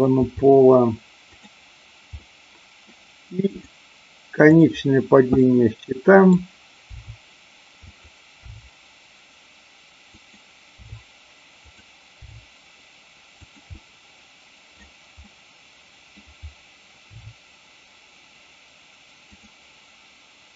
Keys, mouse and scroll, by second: 0.2 r, 2.2 middle click, 3.4 click, 4.4 click, 5.3 middle click, 7.0 r, 7.8 click, 8.4 g, 10.1 click, 10.8 r, 11.7 click, 12.2 g, 13.8-14.8 middle drag, 15.2-16.2 middle drag, 17.2 r, 19.3 click.